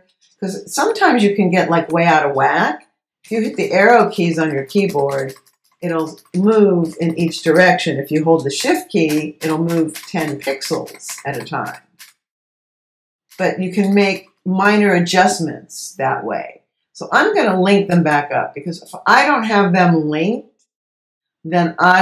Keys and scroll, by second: 3.3 Left, 6.9 Right, 8.3 shift+Right, 8.6 shift+Left, 12.7 Left, 14.1 Left.